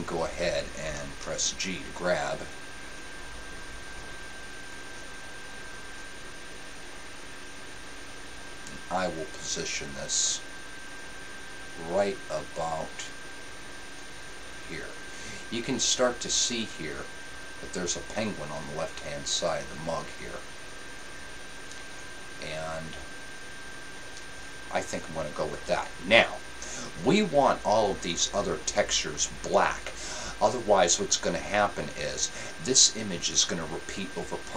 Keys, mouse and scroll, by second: 1.3-2.6 drag, 1.3 g, 4.9-6.7 drag, 4.9 g.